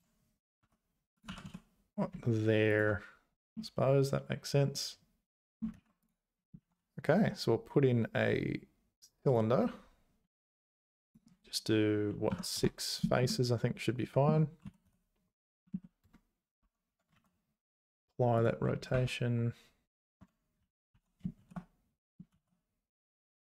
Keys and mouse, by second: 0.7 `, 1.1 click, 1.3 g, 3.7-5.6 middle drag, 5.7 ctrl+z, 6.0 click, 6.6 shift+a, 11.1-13.0 drag, 13.4 middle click, 14.6 r, 16.6 Tab, 16.9 Tab, 17.1 ctrl+a, 18.9 `, 20.2 Tab, 20.6 a, 20.9 s.